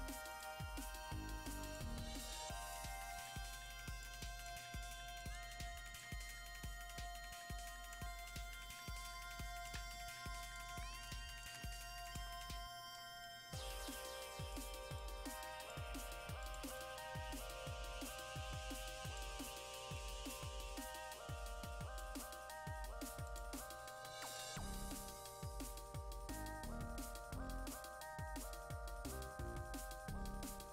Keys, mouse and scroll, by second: 10.1 alt+click, 11.0 shift+click, 12.0 click, 13.2-15.0 drag, 15.0-16.4 drag, 16.4-24.7 drag, 24.7-25.1 scroll down 1, 25.1-26.0 scroll up 1, 26.6-28.5 scroll down 1.